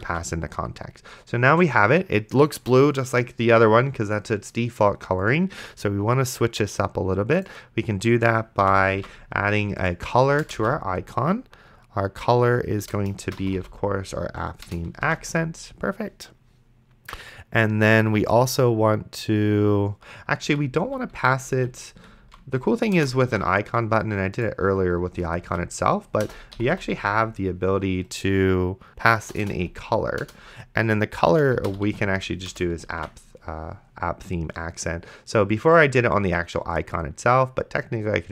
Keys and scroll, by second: 0.3 ctrl+s, 9.2 ctrl+s, 10.4 Return, 10.6 c, 12.8 Return, 13.4 p, 14.7 Return, 15.3 ctrl+s, 20.7 ctrl+z, 22.5 ctrl+s, 23.0 BackSpace, 23.5 ctrl+s, 25.1 Return, 25.5-27.2 typing, 29.5 BackSpace, 29.6 c, 30.2 Return, 31.6-32.4 typing, 32.5 Return, 33.2 ctrl+s.